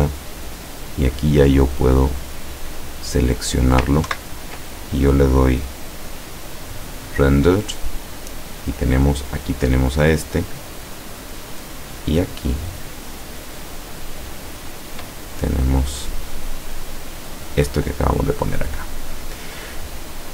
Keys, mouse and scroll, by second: 0.9 click, 2.0 click, 4.1 ctrl+Right, 5.8 click, 6.9 click, 9.7 middle click, 10.5-12.0 middle drag, 12.7 middle click, 13.4-14.0 scroll up 2, 15.3-17.1 middle drag.